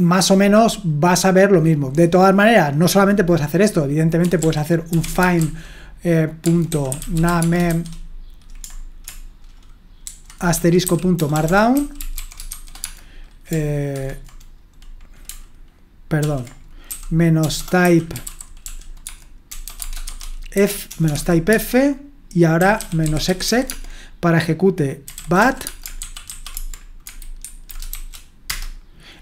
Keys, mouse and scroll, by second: 4.0-8.2 typing, 10.0-14.3 typing, 16.2 ctrl+p, 17.2-27.9 typing, 28.5 Return.